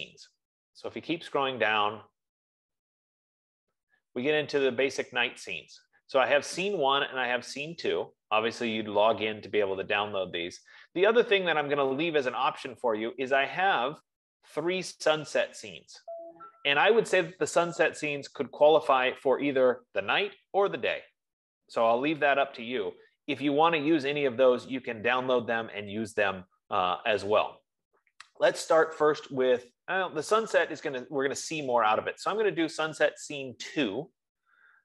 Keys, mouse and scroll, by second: 0.5 scroll, 1.0-1.6 scroll, 2.2-3.7 scroll, 4.2-4.6 scroll, 7.5 scroll, 10.1-10.7 scroll, 11.4 scroll, 12.5-13.6 scroll, 15.0-15.6 scroll, 15.8-16.6 scroll, 16.9-17.3 scroll, 26.5-27.6 scroll, 27.6-27.9 scroll, 28.4-29.6 scroll, 30.2-30.6 scroll, 32.2-32.6 scroll.